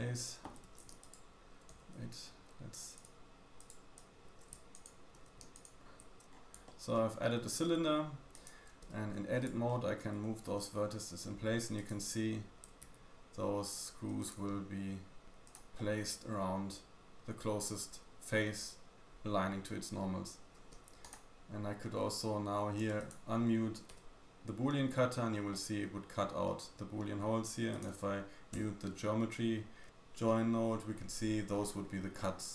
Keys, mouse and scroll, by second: 0.5 a, 0.6 a, 1.0 alt+shift+click, 1.0 alt+shift+right click, 1.7 n, 2.9-3.7 drag, 3.2-3.7 middle drag, 3.2-3.7 right drag, 3.9 click, 3.9 right click, 4.2 a, 4.8 alt+shift+click, 5.1 a, 5.4 alt+click, 5.6 alt+shift+click, 6.3 Tab, 6.3 scroll down 3, 6.3 scroll down 1, 6.5-6.9 shift+middle drag, 7.0-7.6 scroll up 2, 7.6 middle click, 7.6-8.3 scroll up 1, 8.3 click, 8.9 Tab, 9.4 shift+middle click, 10.2 g, 12.1 r, 14.4 r, 15.7 middle click, 20.1-20.7 scroll up 3, 20.7 Tab, 21.0 click, 21.0 middle click, 21.0 right click, 22.2-22.9 scroll down 3, 22.9 click, 24.2 m, 24.9-25.5 scroll up 3, 25.5-27.7 scroll down 1, 27.7 click, 27.7 middle click, 29.9 m, 30.2 middle click, 31.8-32.5 scroll down 2, 32.1 middle click.